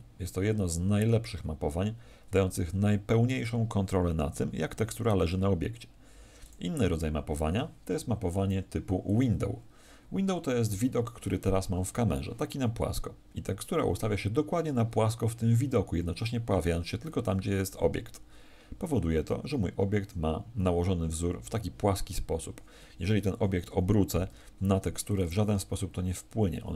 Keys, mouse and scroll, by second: 23.2 Escape, 24.2 r, 25.1 click.